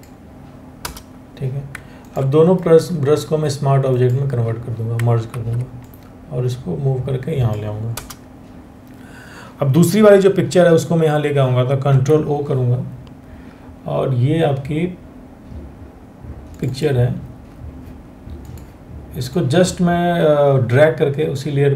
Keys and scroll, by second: 0.4 Return, 4.9 ctrl+t, 7.5 Return, 11.0 Return, 11.5 ctrl+o.